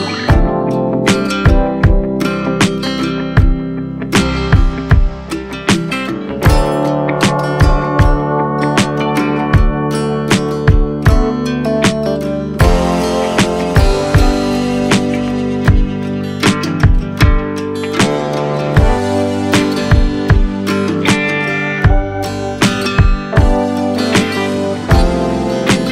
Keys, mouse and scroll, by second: 2.2 s, 6.6 right click, 8.5 shift+g, 11.2-13.1 drag, 14.0-15.9 scroll up 1, 17.8 x, 21.3-22.6 drag, 22.6 i.